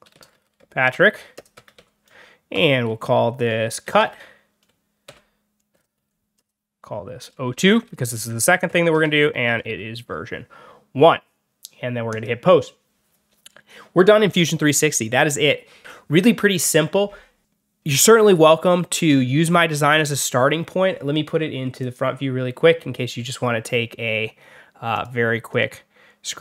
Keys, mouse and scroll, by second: 0.0-2.4 typing, 3.5-9.5 typing, 12.0 click, 21.7 click, 24.8 click, 25.4 click, 26.3 click.